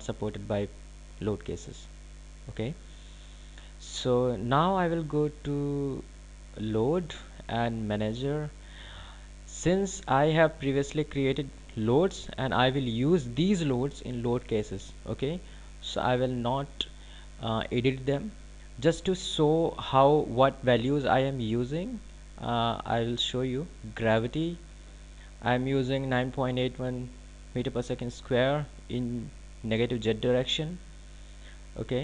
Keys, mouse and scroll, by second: 5.9 click, 27.6 click.